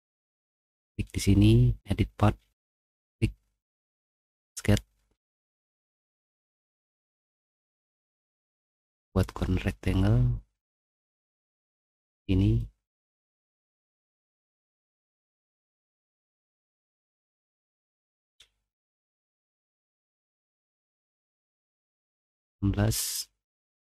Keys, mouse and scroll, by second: 0.6 click, 2.7 click, 4.4 click, 5.7-6.8 middle drag, 6.9 middle click, 11.7-13.1 drag, 13.2 click, 14.3 click, 15.4 click, 16.1 click, 17.3-23.9 typing, 21.3 middle click, 22.2 click, 22.9 click.